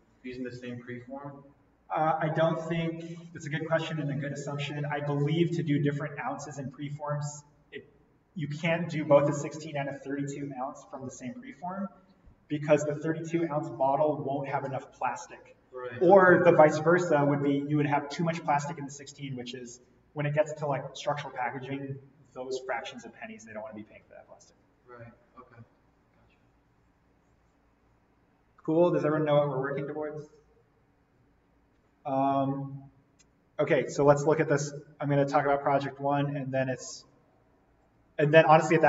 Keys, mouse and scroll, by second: 35.3 click, 38.1 click.